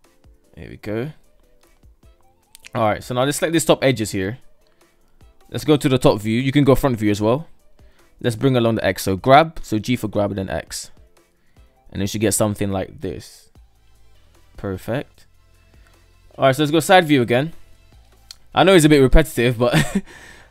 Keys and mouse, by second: 1.0-1.3 shift+middle drag, 2.0 KP_2, 2.6 shift+right click, 3.0 shift+right drag, 3.6 shift+right click, 4.5 Tab, 4.7 KP_7, 5.2 Tab, 5.7-6.2 shift+middle drag, 7.5 g, 9.8 middle drag, 10.1 middle click, 10.4 Tab, 10.9-11.5 middle drag, 12.3 middle drag, 12.5-14.3 middle drag, 14.9 KP_3, 16.3 alt+z, 19.1 KP_1, 20.1 KP_3.